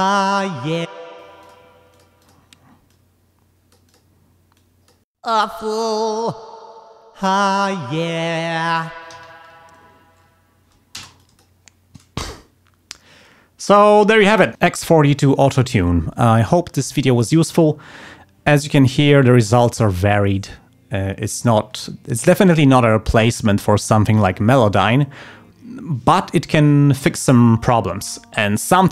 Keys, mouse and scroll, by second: 0.8 d, 0.9 space, 1.0 click, 1.4 click, 1.9 click, 2.2 click, 2.9-4.1 drag, 4.5 click, 5.1 click, 5.2 space, 9.1 g, 9.6 ctrl+scroll down 2, 9.9 ctrl+scroll up 2, 10.9 space, 11.2 click.